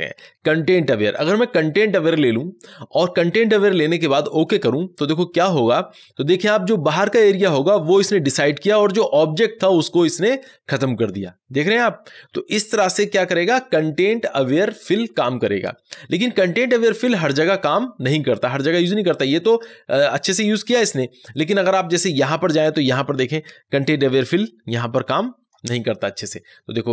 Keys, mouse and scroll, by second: 1.1 click, 4.2 click, 21.3 ctrl+d, 21.7 click, 23.7 click.